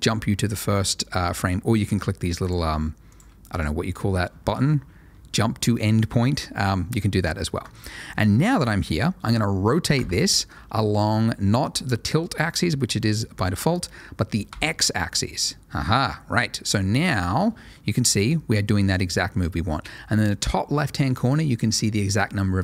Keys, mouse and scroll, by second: 1.7 click, 4.0 click, 10.0 r, 14.5 x.